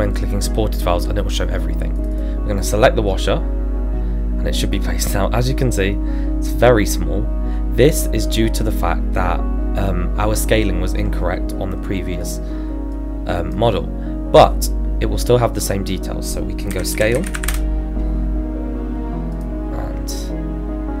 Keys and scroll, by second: 16.7 s, 16.9 c, 17.1 a, 17.3 l, 17.3 Return.